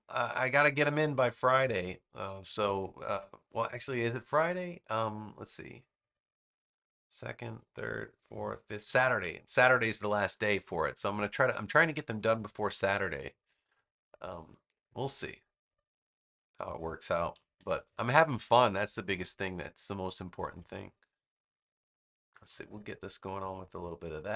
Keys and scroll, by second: 12.6 super+=, 13.7 space, 17.5 super+=, 18.3 space.